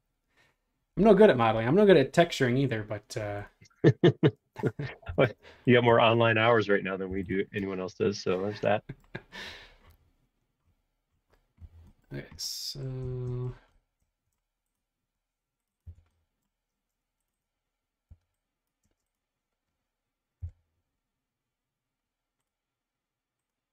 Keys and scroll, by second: 4.2 space, 5.0 b, 5.9 space, 7.1-7.7 typing, 8.8 b, 15.8-18.8 typing, 20.4 p.